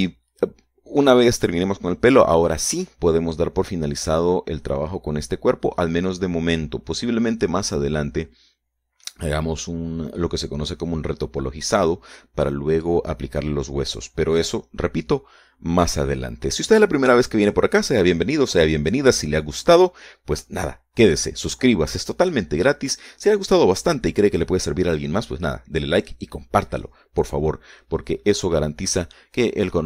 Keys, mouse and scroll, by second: 0.0 shift+middle click, 1.0 shift+middle click, 2.2-5.5 scroll down 2, 5.5-6.0 scroll up 2, 6.3 scroll down 2, 7.7-10.8 middle drag, 17.8-18.1 scroll down 1.